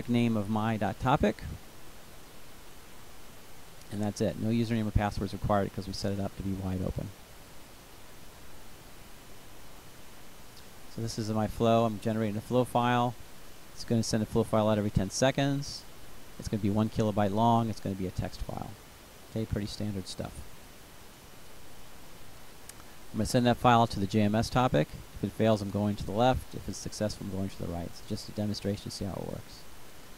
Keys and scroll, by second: 0.0-0.1 typing.